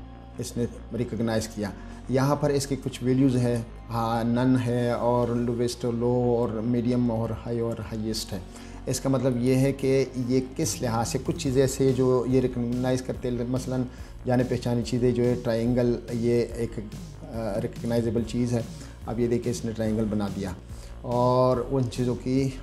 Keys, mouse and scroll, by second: 3.6 click, 9.6 click, 14.9-18.1 drag.